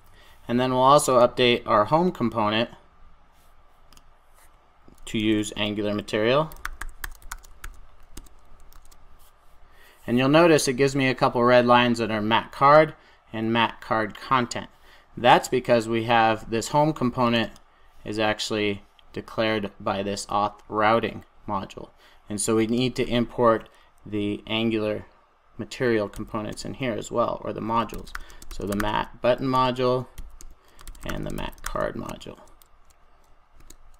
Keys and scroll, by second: 5.2 super+a, 7.5 super+j, 8.6 Return, 11.6 super+s, 29.5 Return.